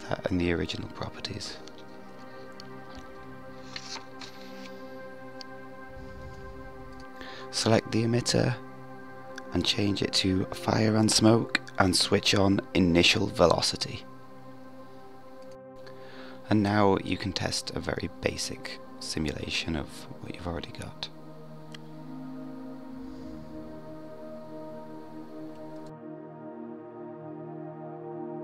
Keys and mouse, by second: 6.9 click, 13.6-14.0 drag, 18.5 click, 25.5 drag, 26.0-28.1 middle drag.